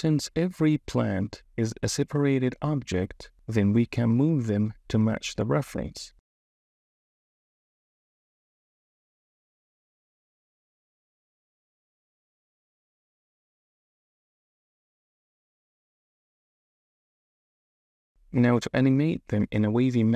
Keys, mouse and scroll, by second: 0.0 ctrl+alt+x, 0.2 ctrl+alt+x, 0.8 s, 1.6 KP_3, 2.1 KP_0, 2.3 s, 3.4 KP_3, 3.5 KP_1, 4.0 ctrl+alt+x, 4.4 KP_3, 4.6 KP_0, 5.7 KP_3, 5.9 ctrl+alt+x, 6.2 KP_0, 7.4 ctrl+alt+x, 8.5 click, 8.8 KP_0, 9.2 click, 9.4 ctrl+alt+x, 10.0 super+KP_3, 10.4 shift+KP_0, 10.6 g, 10.8 s, 11.5 ctrl+alt+x, 11.8-13.9 typing, 14.2 ctrl+alt+x, 15.7 click, 16.0 KP_0, 16.6 click, 17.2 ctrl+alt+x, 17.4 s, 19.2 click.